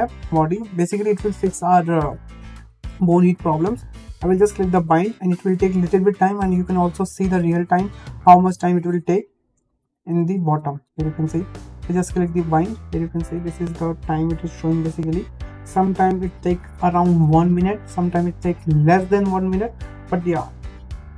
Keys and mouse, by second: 9.0-21.1 drag.